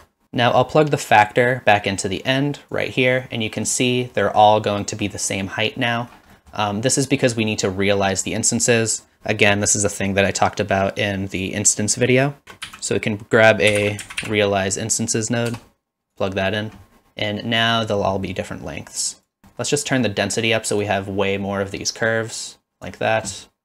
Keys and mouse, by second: 1.2-2.7 drag, 3.2-3.7 middle drag, 4.2 middle drag, 4.8 middle click, 6.5 middle drag, 12.4 shift+a, 18.9 click, 19.5 middle click, 20.1 middle click, 20.9-22.9 drag.